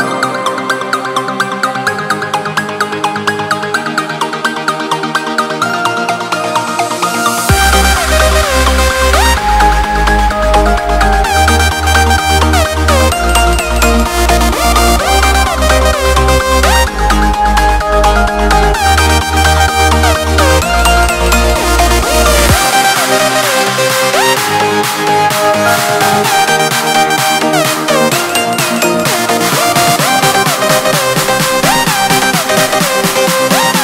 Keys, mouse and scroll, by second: 1.8 click, 3.2 click, 5.1 4, 5.3 5, 5.9 Return, 7.3 click, 8.9 8, 9.7 0, 10.1 Return, 11.4 click, 13.0 2, 13.5 0, 13.9 Return, 15.0 click, 16.3 4, 16.7 0, 17.1 Return, 21.0 click, 22.2 click, 24.3-25.4 typing, 25.7 Return, 29.0 Escape, 29.6 click, 31.4 ctrl+click, 32.9 click.